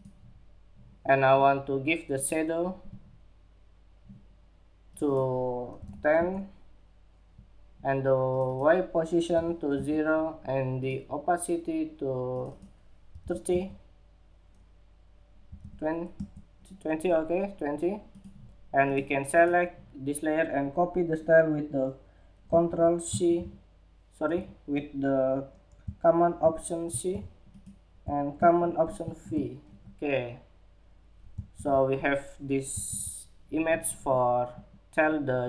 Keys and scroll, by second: 22.6 ctrl+c, 23.8 Escape, 26.5 alt+super+c, 28.6 alt+super+v, 31.1 super+-, 32.4 super+=.